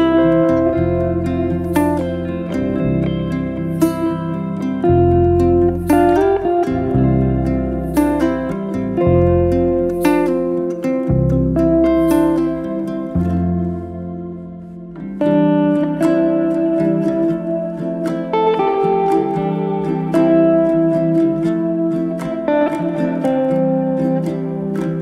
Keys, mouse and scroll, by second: 0.3 click, 1.0 2, 1.5 click, 2.1 g, 3.0-4.3 middle drag, 4.3 click, 4.8 g, 5.5 middle click, 6.4 click, 7.0 g, 8.5 middle click, 8.9 scroll down 1, 9.1-9.7 middle drag, 9.7 Tab, 9.8 scroll up 1, 10.0-10.5 shift+middle drag, 10.5-11.4 right drag, 11.4 drag, 11.9 click, 12.3 click, 12.6-13.5 middle drag, 13.5-14.3 scroll down 2, 14.3-15.1 scroll down 1, 16.0-18.3 shift+middle drag, 18.3 g, 19.1-19.8 middle drag, 19.8 g, 21.2 g, 22.6 middle click, 23.4 s, 24.7-25.0 middle drag.